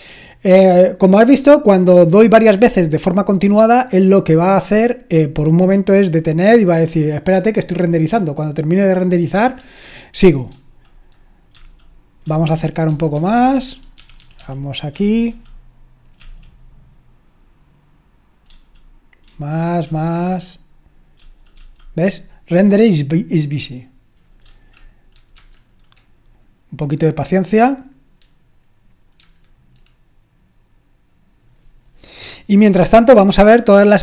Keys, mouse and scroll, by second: 11.5-12.2 typing, 12.9 Left, 13.1 Left, 13.3 Left, 13.5 Left, 13.9 Down, 14.2 Down, 14.4 Down, 14.9-16.1 typing, 18.5-19.8 typing, 21.1-21.5 typing, 24.4-25.3 typing, 29.2 BackSpace, 29.3 Left, 32.8-34.0 scroll down 1.